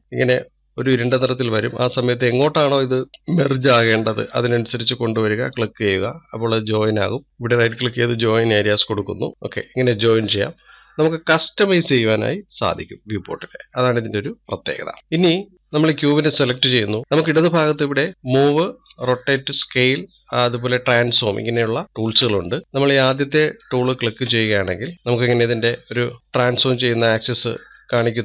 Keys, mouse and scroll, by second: 7.4-9.3 right drag, 15.5 middle click, 15.6 click, 24.0 click, 26.2-27.5 middle drag, 27.5 click.